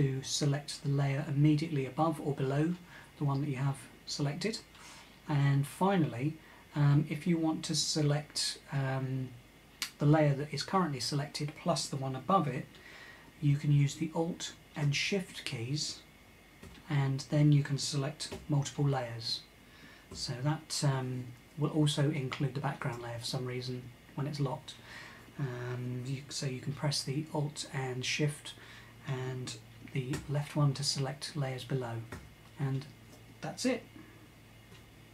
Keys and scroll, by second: 16.2 alt+}, 18.2 alt+}, 19.7 alt+shift+[, 19.8 alt+{, 29.8 alt+{, 31.7 alt+{.